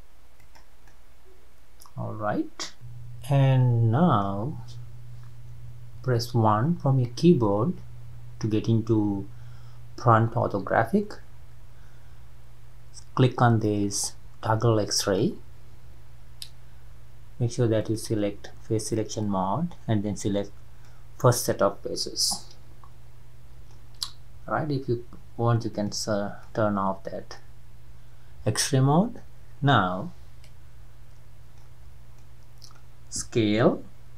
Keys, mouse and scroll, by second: 0.9-5.6 middle drag, 6.0 KP_1, 15.0-18.0 drag, 19.2 drag, 22.0-23.7 middle drag, 23.7-24.3 scroll up 1, 24.3-25.0 scroll up 1, 25.0-25.7 scroll up 1, 25.7 click, 26.4-29.6 middle drag, 31.6 scroll up 1, 31.8-32.2 scroll down 2, 32.2-34.1 middle drag.